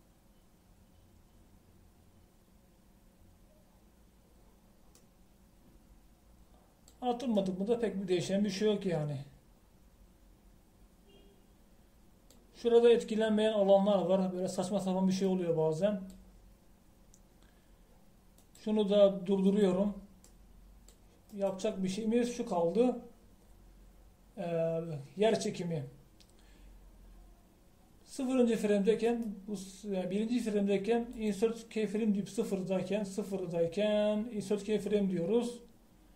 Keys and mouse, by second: 6.2-7.9 middle drag, 19.7-20.7 drag, 30.1-36.1 drag.